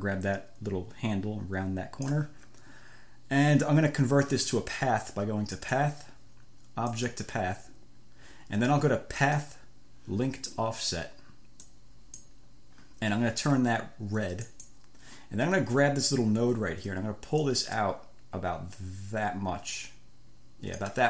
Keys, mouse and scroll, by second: 5.8 click, 7.1 click, 9.5 click, 11.9 click, 14.7 click, 17.7-21.0 drag.